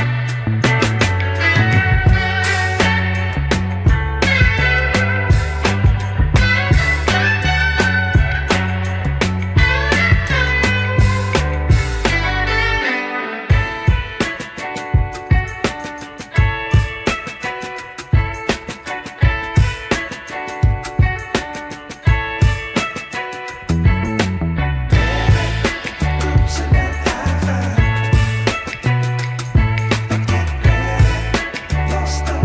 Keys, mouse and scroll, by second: 0.3 shift+middle drag, 1.0 KP_1, 1.8-2.1 shift+middle drag, 2.3-3.0 middle drag, 3.4 shift+middle click, 4.0 shift+a, 8.1-9.5 scroll down 2, 9.5 a, 10.1 g, 10.7 click, 11.4 click, 12.1 click, 12.6 g, 15.3 KP_1, 16.1 scroll up 2, 16.4 shift+middle drag, 17.1 g, 18.5 middle click, 19.3-19.8 scroll down 1, 19.8 click, 19.8 scroll down 1, 21.3-23.0 scroll down 2, 23.4-27.3 drag, 28.0 click.